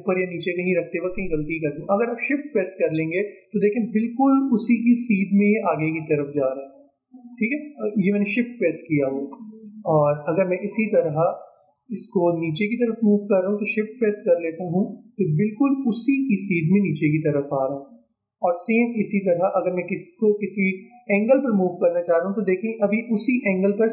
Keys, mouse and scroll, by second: 9.6-10.2 alt+scroll down 1, 12.3-13.1 alt+scroll up 1, 13.1-23.9 shift+drag.